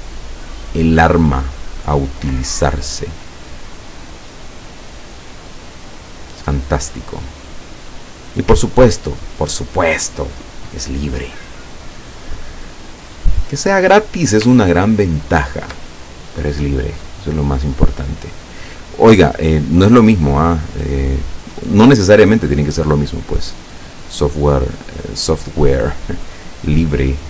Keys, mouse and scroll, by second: 0.1 click, 1.9-4.9 drag, 6.1-8.5 drag, 8.8-9.4 ctrl+scroll down 2, 13.6 click, 14.6 ctrl+scroll up 2, 15.4 ctrl+scroll up 2, 18.8 click, 22.6 click, 25.6 click.